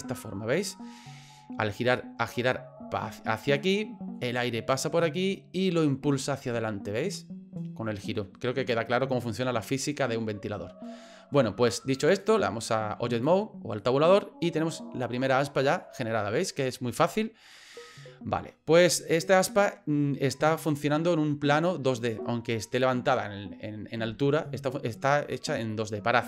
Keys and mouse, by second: 2.0 middle click, 3.5 middle click, 12.1-13.4 drag, 13.8-15.8 middle drag, 16.1-17.2 middle drag, 17.5 middle click, 18.8 middle click, 25.7-26.2 middle drag.